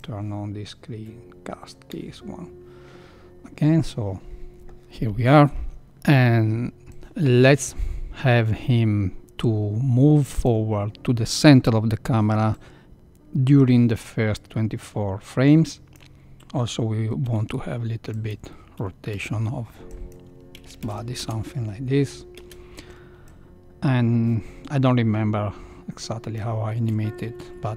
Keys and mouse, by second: 1.8 n, 6.9-10.4 drag, 12.5-16.1 drag, 17.2 r, 19.1 i, 20.8 shift+Left, 21.1 space, 22.3 space, 23.3-26.4 drag, 27.3 r.